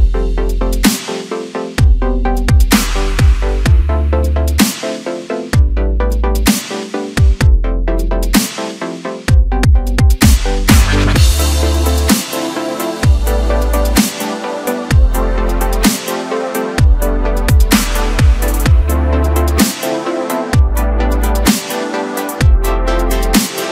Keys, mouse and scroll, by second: 2.1-3.7 drag, 4.0-4.8 scroll down 1, 4.8-7.9 drag, 12.6 scroll down 2, 12.9-14.1 middle drag, 14.1 click, 15.3 click, 16.1 KP_1, 16.6 Tab, 21.4-23.7 drag.